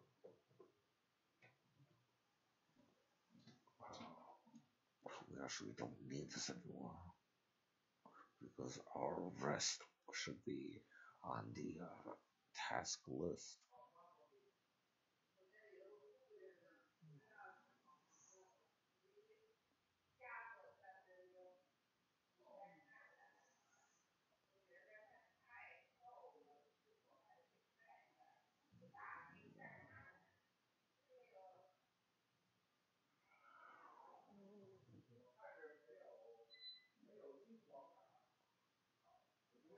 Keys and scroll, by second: 19.1 =, 19.2 BackSpace, 20.2 BackSpace, 23.6-24.9 typing.